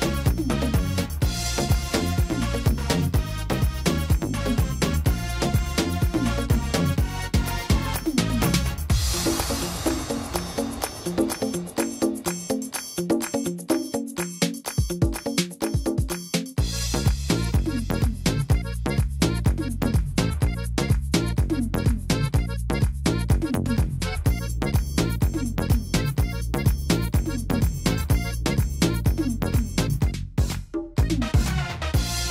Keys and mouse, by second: 0.6-4.2 drag, 2.9 s, 5.0 click, 7.1-9.6 drag, 7.2 g, 9.1 s, 10.6 i, 11.4-12.6 drag, 11.8 s, 13.1 y, 16.0-16.4 drag, 20.3 s, 21.2 drag, 21.5 click, 21.7 click, 23.5-26.1 drag, 26.1-28.2 middle drag, 28.2-30.4 drag, 30.4-31.2 middle drag.